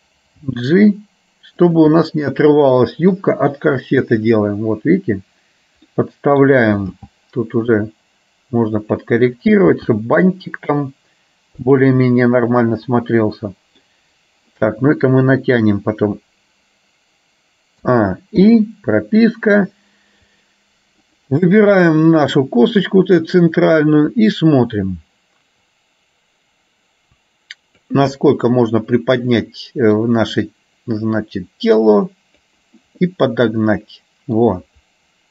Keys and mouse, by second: 0.4 g, 2.1-3.2 middle drag, 4.1 click, 6.2 middle click, 6.9 g, 9.8 g, 12.2-13.9 middle drag, 18.6 i, 21.2 click, 22.2 click, 25.8 click, 26.4-28.1 drag, 28.2-30.1 middle drag, 31.2-32.6 drag, 33.2-34.4 middle drag.